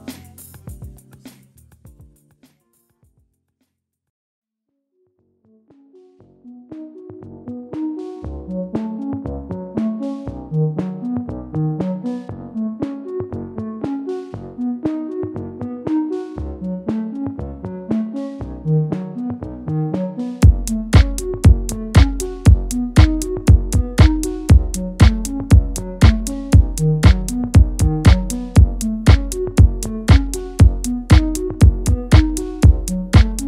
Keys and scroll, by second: 1.1 typing, 2.5-4.8 typing, 5.9-7.6 typing.